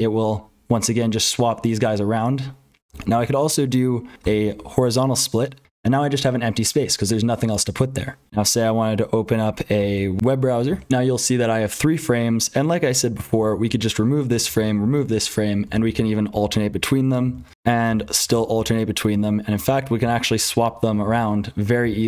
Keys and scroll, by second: 3.1 ctrl+z, 4.2 s, 8.3 ctrl+z, 9.8 w, 10.9 F12, 13.4 ctrl+z, 13.6 r, 14.4 ctrl+z, 14.8 r, 15.6 super+n, 15.8 super+n, 16.3 super+n, 17.2 ctrl+z, 17.5 v, 17.9 super+n, 18.5 super+n, 19.1 super+h, 19.5 super+n, 21.0 super+p, 21.8 super+l.